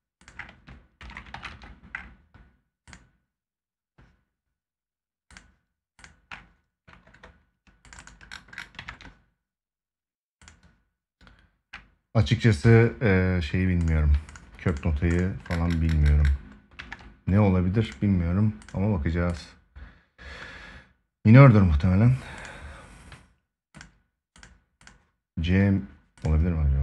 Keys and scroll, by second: 8.5 ctrl+s, 16.5 ctrl+s.